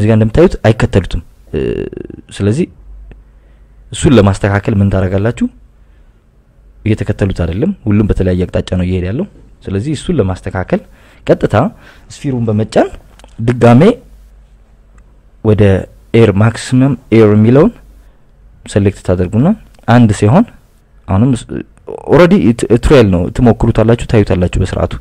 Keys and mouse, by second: 3.3 click, 4.2 right click, 6.1 drag, 6.7 click, 11.9 drag, 12.5 click, 15.5 click, 16.2 click, 18.3 click, 19.9 click, 23.7 click, 24.2 click.